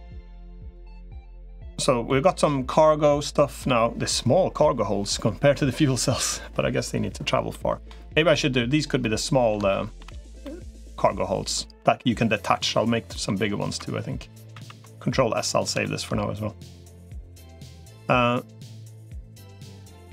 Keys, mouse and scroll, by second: 0.4 click, 0.7-1.8 middle drag, 2.6 middle click, 7.3 middle click, 8.0 click, 8.8 middle click, 9.5 shift+middle click, 10.2 middle click, 12.4 middle click, 14.4 ctrl+s, 15.1 middle click, 15.6 shift+middle click, 16.6 middle click, 17.7-19.1 middle drag, 19.7 middle click.